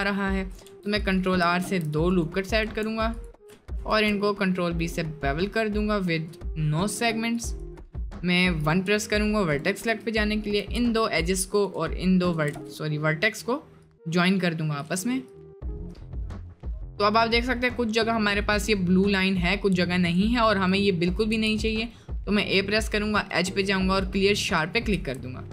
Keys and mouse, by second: 0.2 click, 3.2 alt+shift+click, 7.6 1, 8.5 click, 9.5 shift+click, 10.3 middle click, 10.7 j, 12.6 j, 12.8 middle click, 13.9 click, 15.7 middle click, 16.2 middle click, 20.1-21.3 drag, 21.3 a, 22.8-24.4 drag, 24.8 click, 25.0 Tab, 25.2-25.5 middle drag.